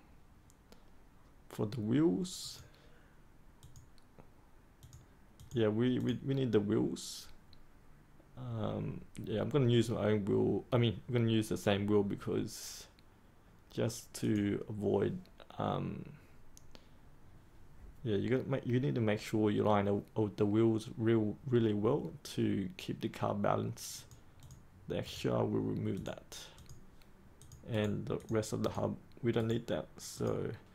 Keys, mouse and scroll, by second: 25.0 right click, 25.9 click, 27.7 right click, 28.1 click, 29.4 right click, 30.1-30.7 drag.